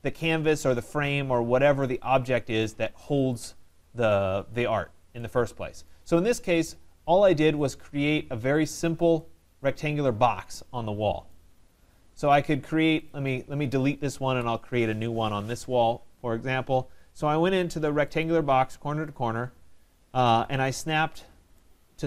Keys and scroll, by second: 14.2 Delete.